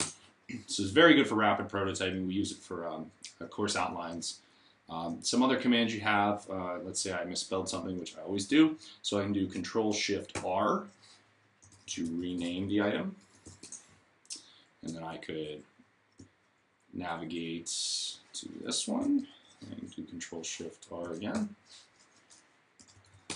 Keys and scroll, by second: 5.9 shift+Up, 10.2 shift+r, 11.2-13.8 typing, 21.0 Caps_Lock, 22.4-23.3 typing.